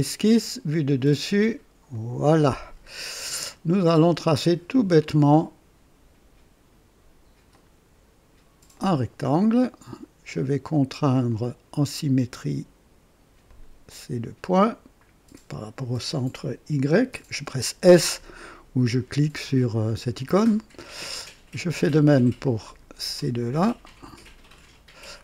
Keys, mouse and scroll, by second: 0.8 click, 1.9 click, 2.9 scroll down 1, 3.4 right click, 4.9 click, 7.5 click, 8.7 click, 9.4 right click, 11.2 click, 13.4 click, 15.5 click, 17.0 s, 22.6 click, 24.4 click.